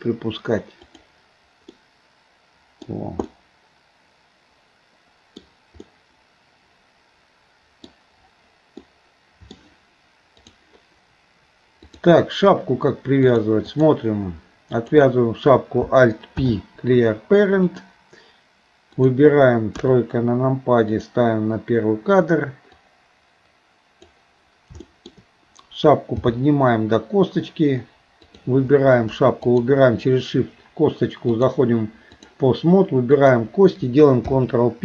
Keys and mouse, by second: 1.7-2.9 middle drag, 3.3-5.4 middle drag, 5.9-7.9 middle drag, 8.9 middle click, 10.4 click, 11.9 click, 13.3 click, 14.8 click, 16.4 alt+p, 19.8 KP_3, 21.0 click, 22.8-24.2 drag, 24.9 shift+middle click, 26.2 g, 29.5 shift+click, 31.4-32.4 drag, 33.1 click, 34.3 ctrl+p.